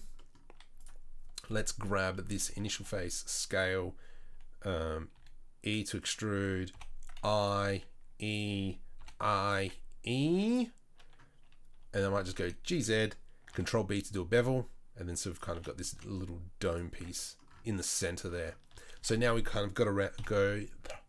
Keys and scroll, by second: 1.6 3, 2.8 s, 5.1 e, 6.7 i, 7.7 e, 9.0 i, 9.6 e, 11.9 g, 13.5 ctrl+b, 15.5 s, 16.9 Tab, 18.7 Tab, 19.0 Tab, 20.2 KP_7.